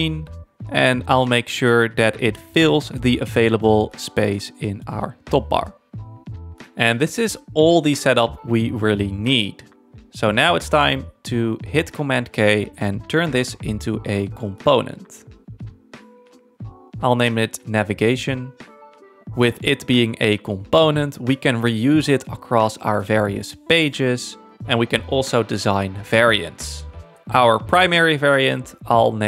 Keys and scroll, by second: 2.6 1, 2.9 f, 3.5 Return, 4.5 super+-, 7.4 z, 8.3 space, 14.9 super+k, 15.8 Down, 16.3 Return, 17.1-18.4 typing, 19.1 Return, 22.2 super+-.